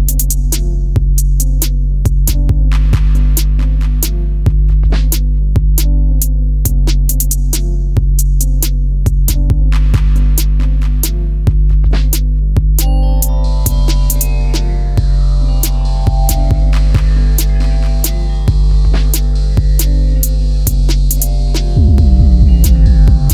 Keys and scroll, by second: 22.2 Down.